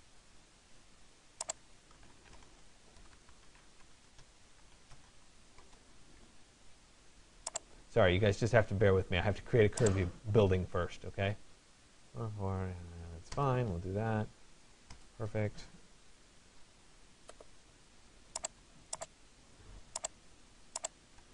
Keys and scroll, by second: 13.0 Return.